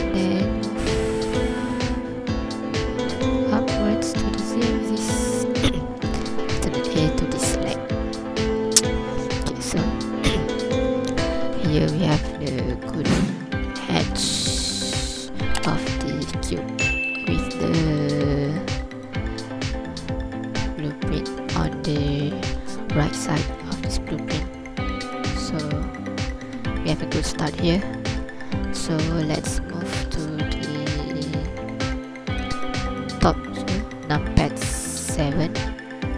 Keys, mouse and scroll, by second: 0.2 click, 6.1 alt+a, 6.2 scroll down 3, 6.7 ctrl+click, 7.0 scroll up 2, 7.7 scroll down 1, 8.2 ctrl+click, 8.8 scroll up 1, 9.2 scroll down 1, 9.5 scroll up 1, 15.1-17.0 scroll down 2, 15.4-17.0 scroll up 1, 22.7 scroll down 3, 23.4 ctrl+click, 23.7-24.1 scroll up 2, 24.1 scroll down 1, 25.2 shift+click, 27.3 KP_3, 27.6 scroll up 2, 28.0 ctrl+click, 28.4-29.1 scroll down 2, 29.1 click, 30.1 scroll up 1, 33.6 KP_7, 34.6 ctrl+click, 35.4-35.9 scroll down 2, 35.9 ctrl+click.